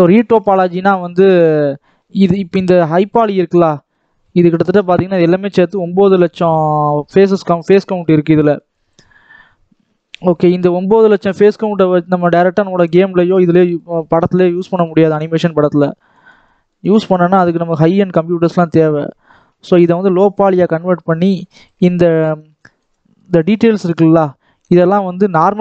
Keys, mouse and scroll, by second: 0.5 middle click, 0.9-1.7 scroll down 3, 1.2 middle click, 1.7 shift+middle click, 2.5 scroll down 1, 2.6 middle click, 3.4 scroll up 2, 3.6-7.2 middle drag, 7.2-8.3 scroll up 1, 8.3-11.4 drag, 11.4 shift+middle click, 12.0-13.8 drag, 13.8-15.4 middle drag, 15.4-16.0 scroll up 2, 16.0-20.4 shift+drag, 21.6 middle click, 22.0-22.5 scroll up 1, 22.5-25.6 drag.